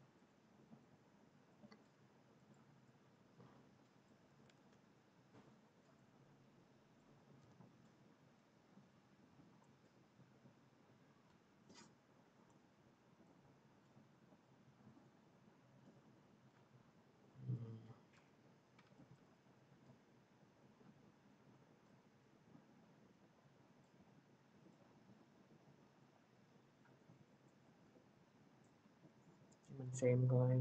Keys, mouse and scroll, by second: 0.2 click, 2.4 click, 4.4 ctrl+z, 5.3 click, 6.8 click, 7.2 v, 9.5 click, 13.2 click, 14.9 click, 18.0 p, 19.1 click, 21.8 click, 24.6 click.